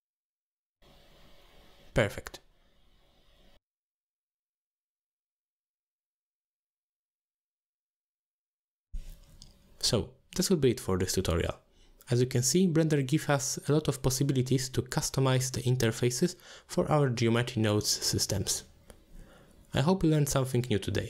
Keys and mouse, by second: 0.6 click, 2.3 shift+middle drag, 3.2-4.3 middle drag, 4.8 Tab, 5.3 Tab, 5.6 shift+middle click, 6.0 click, 6.3 Tab, 6.6 a, 6.9 s, 7.8 g, 8.7 Tab, 9.0-9.5 middle drag, 9.9-11.4 middle drag, 11.9 middle click, 12.7 click, 14.7-15.4 drag, 16.3-17.0 drag, 17.8-18.5 drag, 19.9 middle click.